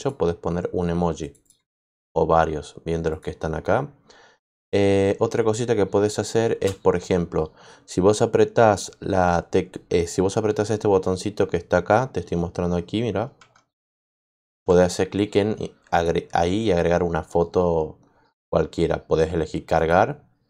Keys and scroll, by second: 6.4 shift+Return.